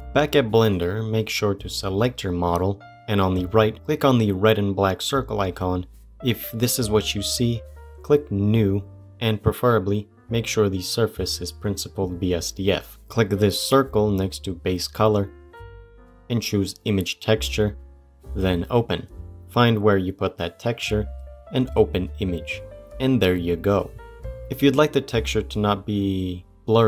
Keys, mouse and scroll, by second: 0.9 click, 4.9 click, 6.0-11.2 drag, 15.3-17.0 drag.